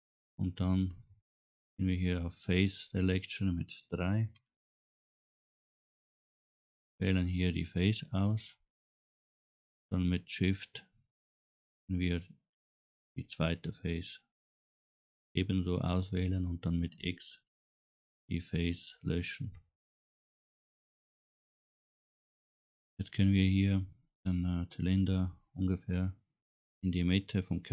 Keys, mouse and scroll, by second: 0.2 middle click, 4.5 3, 6.0 click, 8.4 middle click, 9.6 middle click, 12.0 shift+click, 12.9 middle click, 14.4 scroll down 2, 14.7 scroll up 1, 17.3 x, 21.3 Tab, 25.6 middle click.